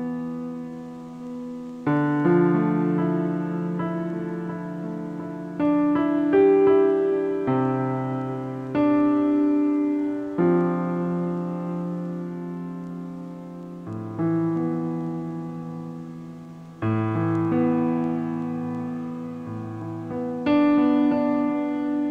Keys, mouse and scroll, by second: 2.1 shift+a, 5.7 shift+a, 9.4 ctrl+alt+KP_0, 16.6 a, 16.8 a, 17.4 shift+a, 20.8-22.1 drag.